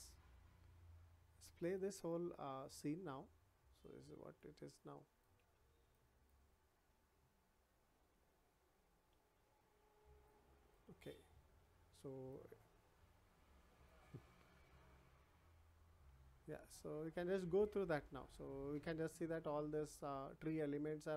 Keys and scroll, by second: 5.5 w, 8.1 w, 14.3 w.